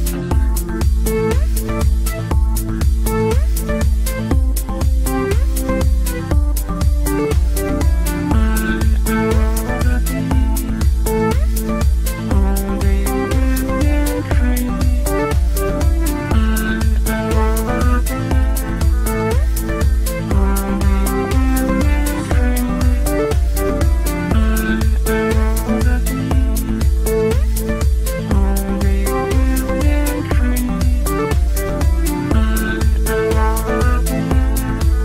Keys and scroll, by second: 18.4 ctrl+z, 31.6 ctrl+z.